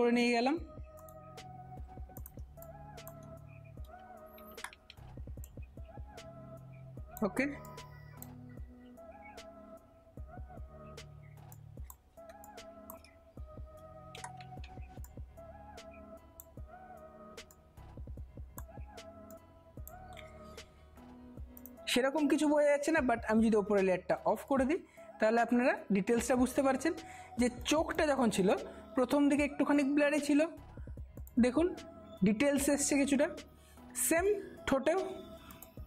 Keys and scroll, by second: 2.5 space, 4.4 ], 4.7 ], 4.9 ], 5.1 ], 12.4 space, 14.3 [, 14.6 [, 29.0 space, 33.1 space, 35.7 space.